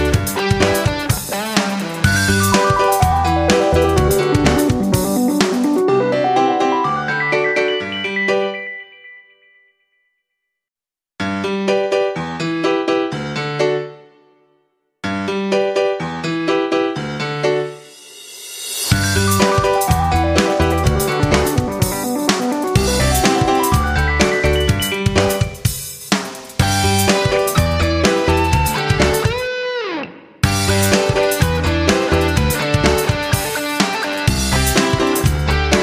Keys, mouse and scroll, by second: 0.9 shift+click, 3.0 shift+click, 4.3 ctrl+g, 5.0 click, 5.9 ctrl+scroll, 7.6 click, 10.7 ctrl+scroll up 1, 12.6 click, 13.1 ctrl+scroll up 1, 13.8 scroll up 1, 14.7-17.6 drag, 22.5 ctrl+scroll up 1, 23.7 click, 27.7 shift+click, 28.7 click.